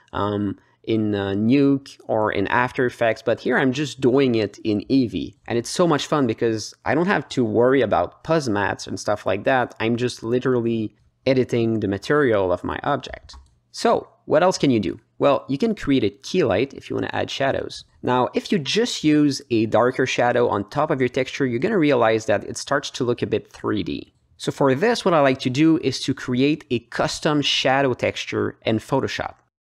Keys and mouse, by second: 0.3 drag, 1.0 click, 1.8-2.1 drag, 2.6-3.1 drag, 5.4 g, 6.3 click, 6.4 middle click, 6.7 alt+shift+middle click, 7.1 ctrl+alt+middle drag, 7.3 alt+middle click, 7.6 g, 9.0 ctrl+alt+middle click, 9.3 g, 11.8 click, 12.0 alt+middle click, 12.3 g, 13.7 click, 13.8 alt+middle click, 14.2 g, 16.3 drag, 16.8-17.3 drag, 17.6 drag, 18.2 alt+h, 18.3 middle click, 18.7 drag, 19.8 drag, 20.4-21.2 drag, 21.4 click, 21.7 h, 22.4 click, 23.1-25.3 drag, 25.5 click, 26.0 click, 26.4 h, 26.9-28.3 drag, 28.7-29.0 alt+middle drag.